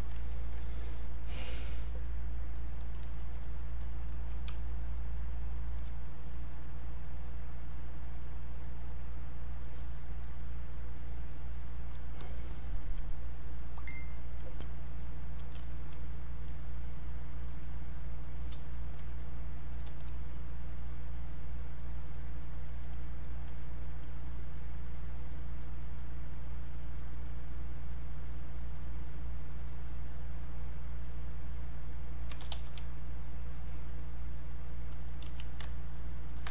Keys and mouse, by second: 0.3 ctrl+right click, 2.6 click, 3.4 click, 4.5 space, 6.3 click, 8.3-12.7 drag, 14.1 alt+click, 14.7-20.7 drag, 23.3 alt+click, 26.5 click, 29.7 click, 32.5 e, 33.5-35.2 drag, 35.2 q, 35.9 ctrl+click.